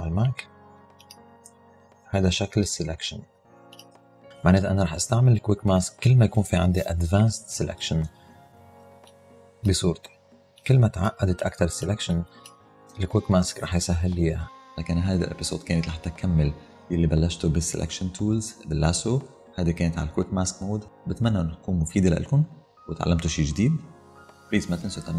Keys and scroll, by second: 8.9 space.